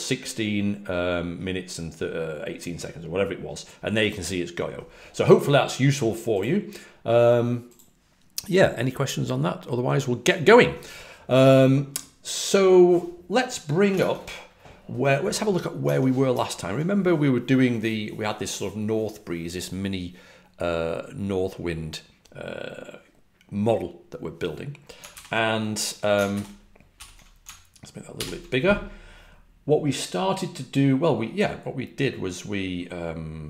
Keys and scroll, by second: 13.9 super+Tab, 15.8 super+Tab, 16.2 super+Tab, 25.1 super+n, 26.3 ctrl+alt+super+Left, 26.9 alt+super+f, 28.1 super+=.